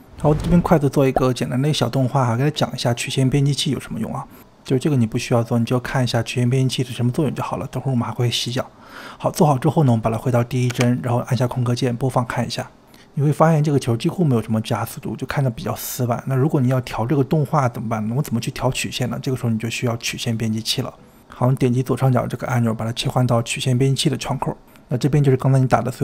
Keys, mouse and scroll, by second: 0.2 drag, 0.4 space, 0.8-1.2 drag, 1.3 g, 3.3 ctrl+z, 4.3-4.6 drag, 4.6 ctrl+z, 4.8 click, 4.9 click, 5.1 s, 5.2 click, 5.7-6.3 drag, 6.3 click, 8.6-10.9 drag, 10.9 space, 14.5 space, 23.3-25.4 drag, 25.4-26.0 scroll down 7.